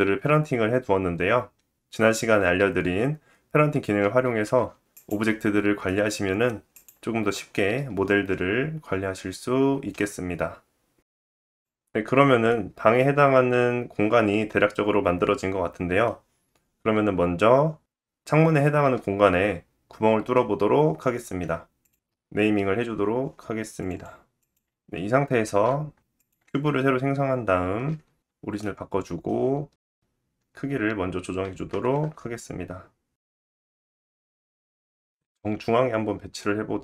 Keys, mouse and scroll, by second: 3.6-9.4 middle drag, 4.2 g, 9.4-11.5 drag, 11.7-22.6 middle drag, 21.9 shift+click, 22.6-24.2 shift+drag, 22.9 o, 24.2-24.9 middle drag, 24.9-25.3 drag, 25.6 shift+a, 25.7-28.9 middle drag, 26.7 g, 28.9-31.1 drag, 30.4-33.9 typing, 31.1-35.1 middle drag, 35.1 click, 35.6 middle click, 35.7-36.8 drag.